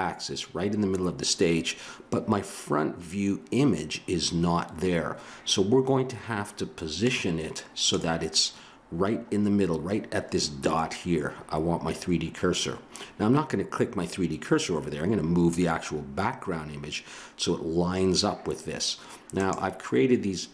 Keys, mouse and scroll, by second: 7.0-18.9 drag.